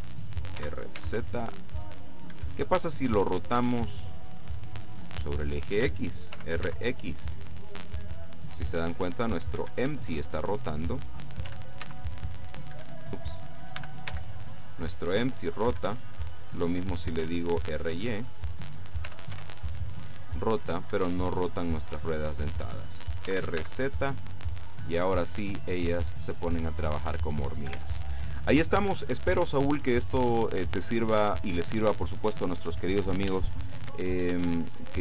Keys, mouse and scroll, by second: 0.7 r, 1.1 z, 2.4 Escape, 3.7-4.7 middle drag, 5.2 middle click, 6.4 r, 6.7 x, 9.7 Escape, 10.1-11.3 drag, 11.5 r, 11.9 z, 12.8 Escape, 13.8 r, 14.2 x, 15.7 Escape, 16.1 middle click, 19.1 r, 19.4 y, 21.1 Escape, 22.1 scroll down 2, 22.4 middle click, 23.4 r, 23.7 z, 27.7 Escape, 29.0-29.6 scroll down 2, 29.7-30.8 middle drag, 30.8-31.3 scroll up 1, 31.3-31.8 scroll down 1, 31.8-33.4 scroll down 1, 33.5 shift+middle click.